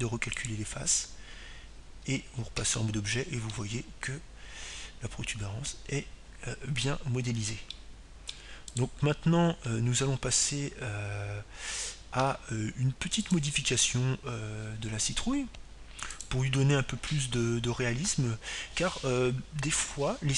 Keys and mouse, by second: 3.3-5.4 drag, 6.0 Tab, 6.9-9.1 middle drag, 11.3-13.0 middle drag, 11.8-14.8 right drag, 16.4-18.6 drag, 19.2-20.3 drag.